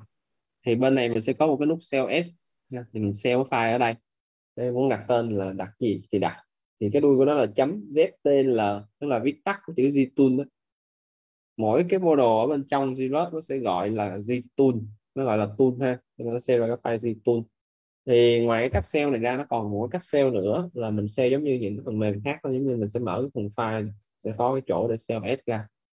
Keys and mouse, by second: 2.8 click, 10.4 click, 23.3 click.